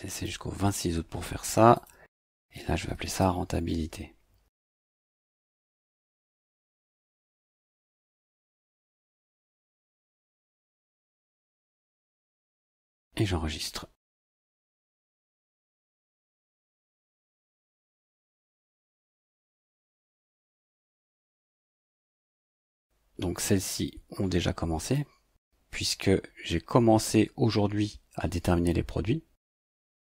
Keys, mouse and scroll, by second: 0.1 click, 1.7 click, 2.6-8.9 typing, 10.1 click, 14.2 click, 16.0 click, 17.4-19.5 drag, 23.6-25.1 drag.